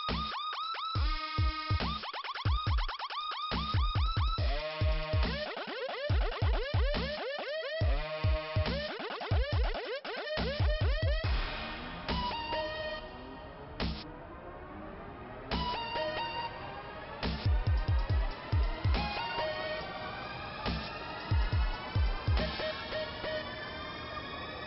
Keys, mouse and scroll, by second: 0.4 click, 1.3 click, 2.6 click, 4.2 click, 6.3 click, 10.8 click, 11.7 click, 14.6 click, 16.3 m, 17.4 click, 17.8 m, 21.0 scroll up 1, 22.7 click.